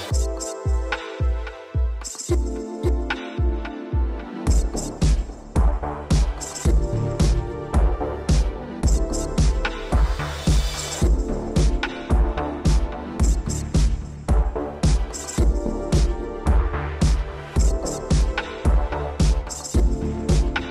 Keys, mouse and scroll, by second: 1.4 click, 5.5 ctrl+v, 6.6 click, 8.5 ctrl+s, 9.1 scroll down 3, 9.7 ctrl+s, 10.0 middle click, 10.9 middle click, 11.0 middle click, 11.5 ctrl+s, 11.8 scroll down 1, 12.0 shift+middle click, 12.6 middle click, 12.8 middle click, 13.3 shift+Left, 13.7 shift+space, 15.2 Escape, 16.4 shift+Left, 16.9 shift+space, 17.8 Escape, 18.9 shift+middle click, 19.0 middle click, 19.1 Escape, 19.1 scroll up 4, 19.6 middle click.